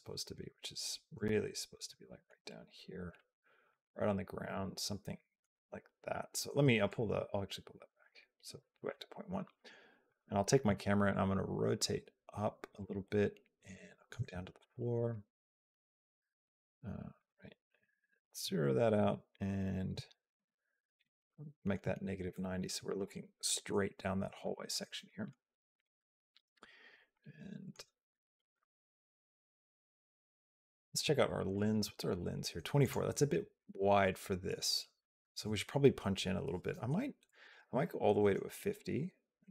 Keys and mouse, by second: 1.1 shift+middle click, 3.0 shift+click, 4.3 shift+middle click, 7.8 click, 9.9 click, 11.0 click, 12.8 shift+middle click, 13.5 shift+middle click, 14.8 click, 15.8 shift+middle click, 17.1 click, 18.8 click, 21.1 shift+middle click, 22.1 shift+middle click, 24.2 shift+middle click, 24.9 shift+middle click, 26.9 shift+middle click, 28.5 click, 31.3 click, 32.6 click, 39.3 shift+middle click.